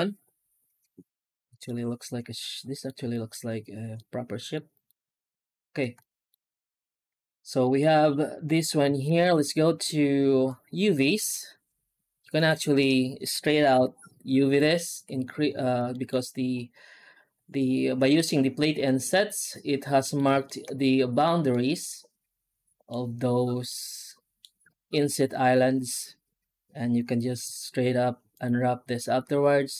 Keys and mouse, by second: 1.9-2.7 middle drag, 3.0 shift+middle drag, 3.8-4.4 middle drag, 4.6 right click, 5.7 Tab, 5.8 middle click, 7.0 alt+a, 7.5 middle click, 9.0 ctrl+space, 10.3 click, 12.3-13.7 drag, 14.4 middle click, 14.8 a, 15.8 shift+middle click, 18.7-20.0 middle drag, 20.3 shift+middle click, 21.4-22.7 middle drag, 23.6 middle click, 27.3 u.